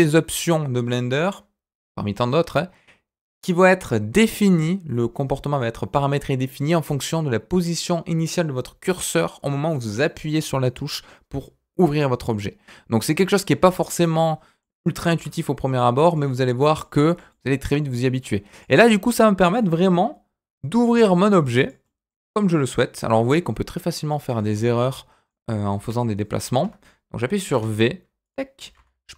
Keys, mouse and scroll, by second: 14.0 middle click, 15.1 g, 16.3 middle click, 17.0 shift+middle click, 17.3 middle click, 18.5 click, 18.8 middle click, 19.6 shift+middle click, 20.9 v, 21.8 middle click, 22.4 middle click, 22.9-23.2 scroll down 1, 23.2-24.2 middle drag, 24.5 ctrl+z, 24.7 middle click, 25.7 g, 27.5 v, 28.6 g.